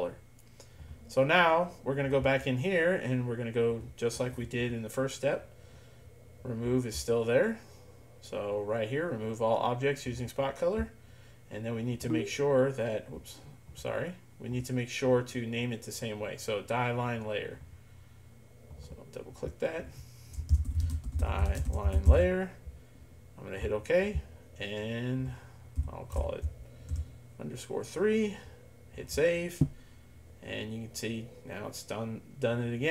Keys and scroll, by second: 20.3-22.7 typing, 25.8 End, 26.2 shift+BackSpace, 26.9 3.